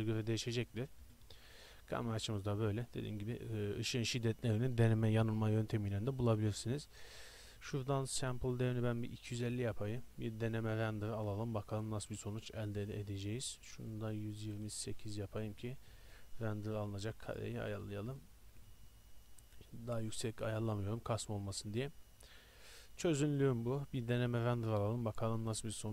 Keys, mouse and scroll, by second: 1.1 KP_0, 23.4-24.2 middle drag.